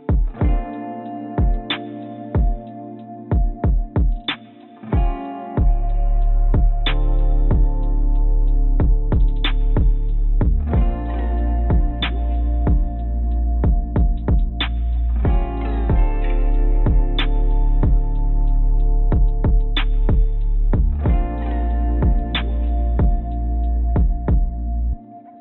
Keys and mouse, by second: 2.4 3, 2.7 click, 9.5 click, 13.1 shift+click, 13.5 shift+click, 14.7 click, 15.9 shift+click, 17.6 shift+click, 18.4 shift+click, 19.6 shift+click, 20.7 shift+click, 23.0-24.7 drag.